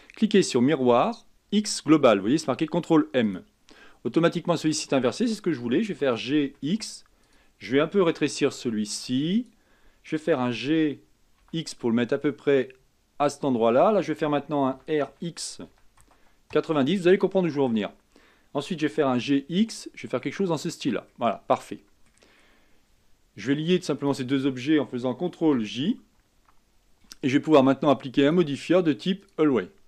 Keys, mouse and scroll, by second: 6.1 g, 8.6 s, 10.5 g, 14.9 r, 17.5-18.8 middle drag, 18.8 g, 21.3-24.2 middle drag, 24.2 shift+click, 25.7 ctrl+j, 28.4 click, 29.5-29.8 drag.